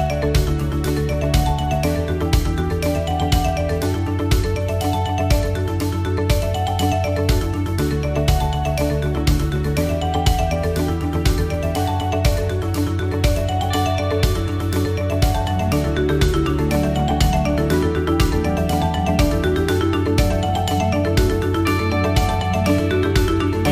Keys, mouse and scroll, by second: 0.6 click, 1.7 click, 4.6 click, 5.4 click, 6.0 click, 6.6 click, 7.2 click, 7.9 click, 9.1 click, 10.5 click, 11.3 click, 13.2 click, 13.5 click, 13.7-14.5 click, 14.3 click, 15.4 click, 16.7 click, 18.7 click, 19.5 click, 20.4-20.7 scroll down 2, 20.8 middle click, 22.1 shift+middle click, 23.0 scroll up 2, 23.5 middle click.